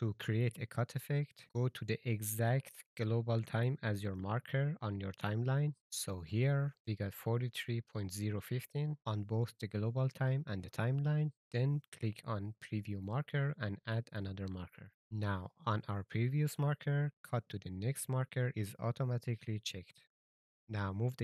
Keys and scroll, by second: 21.1 a.